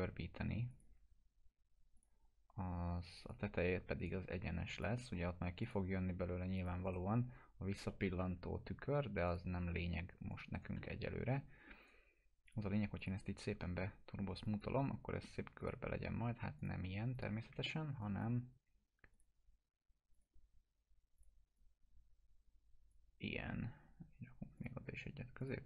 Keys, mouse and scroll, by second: 0.7 click, 4.0 right click, 4.8 click, 6.8 right click, 6.9 right click, 7.9-8.5 alt+middle drag, 9.3 click, 10.5 right click, 10.8-11.4 alt+middle click, 11.8 right click, 12.5 click, 13.3 t, 14.4 click, 17.6 alt+middle click, 18.0-23.2 drag.